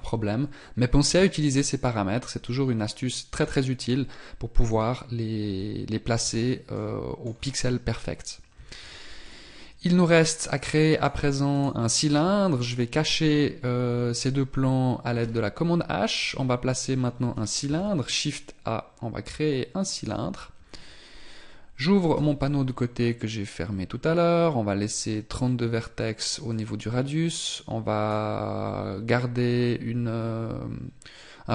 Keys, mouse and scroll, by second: 1.2 n, 4.8 n, 5.6 n, 6.3 n, 6.8 middle click, 7.4 scroll down 5, 8.6 z, 9.3 scroll down 2, 10.2 right click, 12.7 shift+right click, 12.8 shift+right click, 15.3 h, 16.3-16.6 scroll up 3, 17.8 shift+a, 22.2 t, 26.6 click.